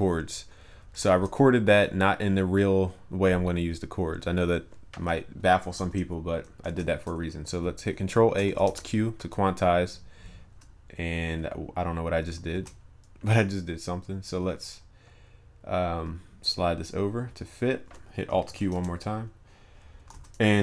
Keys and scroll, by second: 1.1 ctrl+a, 5.8 ctrl+s, 6.6 ctrl+a, 8.4 alt+q, 10.1 ctrl+b, 12.6 ctrl+z, 18.5 alt+q, 20.1 ctrl+s.